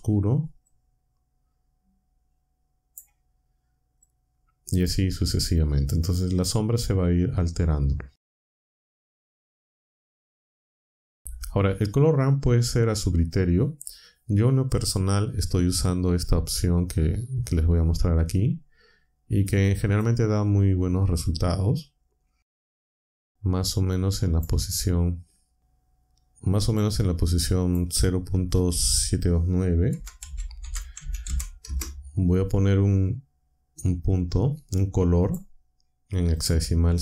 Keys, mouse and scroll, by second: 0.7-3.1 drag, 4.0 click, 8.3 click, 8.9 click, 9.4 click, 18.8-20.1 drag, 24.3 click, 26.6 click, 27.6 click, 29.6-31.7 typing, 35.2 click, 36.3 click.